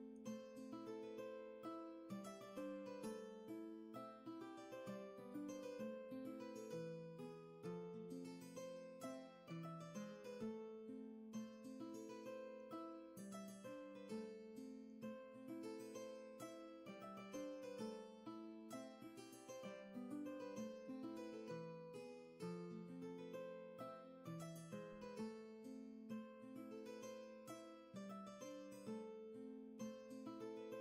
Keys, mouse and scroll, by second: 18.5 ctrl+z, 19.8 ctrl+z.